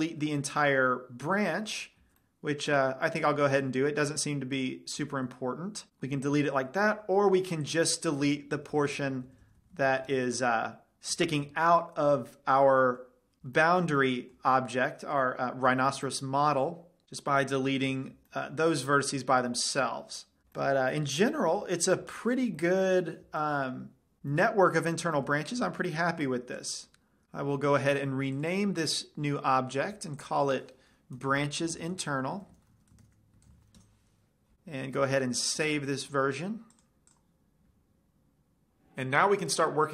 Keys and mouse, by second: 0.4 ctrl+l, 1.4 middle click, 2.6 z, 5.7 x, 7.4 ctrl+z, 8.4-9.9 drag, 13.0 middle click, 17.0 middle click, 17.2 x, 18.9-20.4 middle drag, 21.1-24.6 middle drag, 26.3 z, 26.9 Tab, 28.9-32.6 drag, 38.3 ctrl+shift+s, 38.3 click.